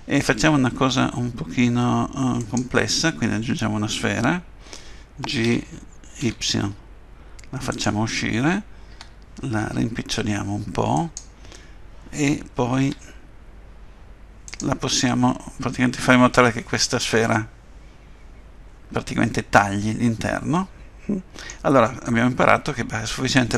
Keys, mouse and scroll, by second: 5.5 g, 8.9 s, 12.8 g, 15.0 middle click, 23.4 click.